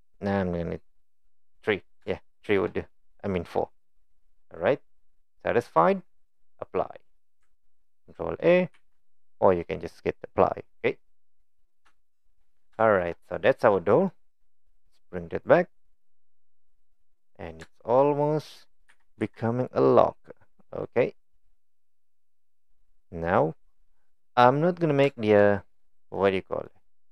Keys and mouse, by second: 2.3 shift+middle drag, 3.0 click, 8.7 ctrl+a, 11.0-11.4 middle drag, 12.0-12.3 shift+middle drag, 12.8 shift+middle click, 13.2-14.1 middle drag, 15.4 click, 15.8-16.7 middle drag, 17.1 click, 17.6 shift+middle drag, 18.9 g, 24.3-24.9 middle drag, 25.1 shift+middle drag, 25.5 middle drag, 26.2-26.7 middle drag.